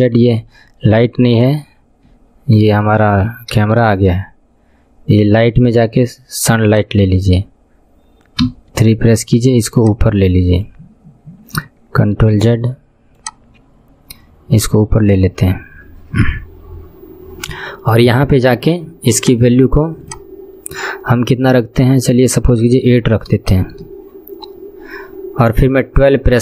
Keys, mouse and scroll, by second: 0.5 ctrl+z, 1.1 ctrl+z, 2.2 ctrl+z, 3.9 shift+a, 8.5 KP_1, 9.9-12.5 drag, 12.5 ctrl+z, 13.3-16.3 drag, 18.1-18.7 scroll down 12, 19.3-26.4 drag.